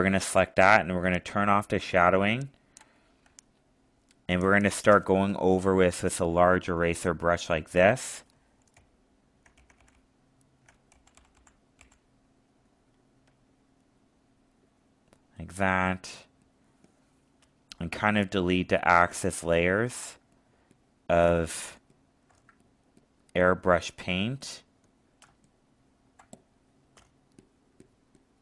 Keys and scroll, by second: 3.3 alt+space, 18.2 alt+space, 21.7 alt+space, 25.2 alt+space.